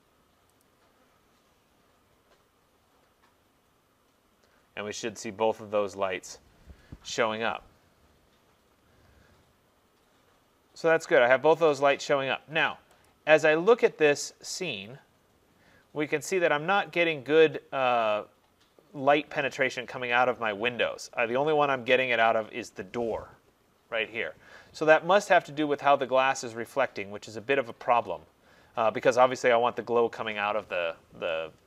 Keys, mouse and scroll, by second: 0.7 click, 13.1 click, 14.3-14.9 scroll, 14.9-16.2 scroll, 16.2-17.2 scroll, 27.8 click.